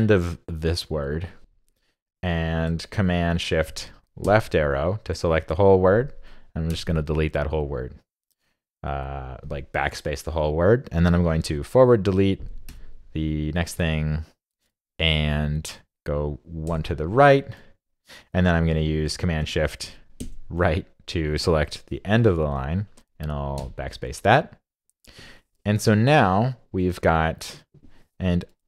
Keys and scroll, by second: 4.2 shift+super+Left, 20.2 shift+super+Right.